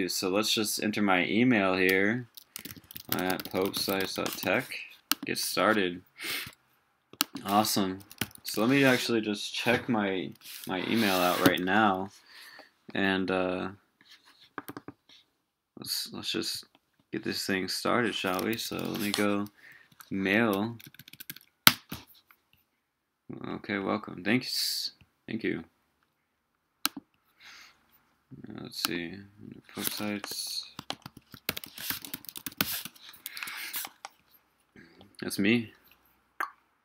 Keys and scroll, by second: 8.0 super+t, 8.6 super+w, 18.5 super+t.